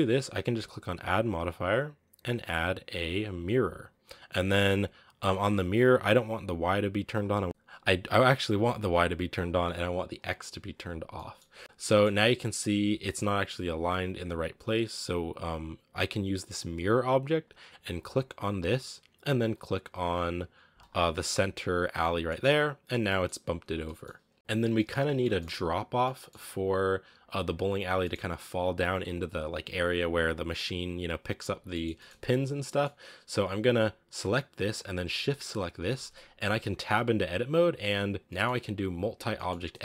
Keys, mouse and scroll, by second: 3.7-11.0 drag, 11.0-18.3 middle drag, 18.3 click, 21.6 scroll down 4, 21.8-22.3 middle drag, 22.3 scroll up 3, 23.0 middle drag, 23.1 scroll up 1, 23.5 a, 23.7-25.8 middle drag, 25.8-26.6 scroll up 3, 25.9-26.2 middle drag, 26.9-27.7 scroll up 1, 27.7 scroll down 3, 27.9-31.2 middle drag, 31.2-31.5 scroll up 2, 31.5 scroll down 1, 31.5-32.0 shift+middle drag, 32.0-32.4 scroll up 2, 32.4 scroll down 1, 32.5-32.8 middle drag, 32.8 scroll up 2, 33.4 right click, 33.6-35.3 scroll down 2, 35.3 shift+right click, 36.7 Tab, 37.8 scroll down 1, 38.1-39.8 middle drag.